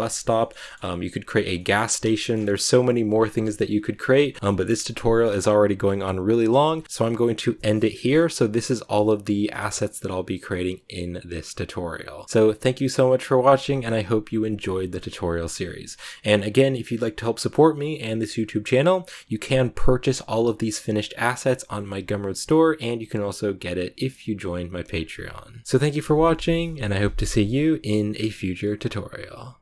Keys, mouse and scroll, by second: 0.0-1.4 shift+middle drag, 1.4 scroll up 1, 1.5-3.1 middle drag, 3.1-3.5 scroll down 1, 3.5 a, 3.7 scroll down 1, 3.8 a, 4.0 shift+middle click, 4.3 scroll down 1, 4.3-6.8 shift+middle drag, 6.8 a, 12.2-25.6 scroll down 1, 25.6-29.6 middle drag.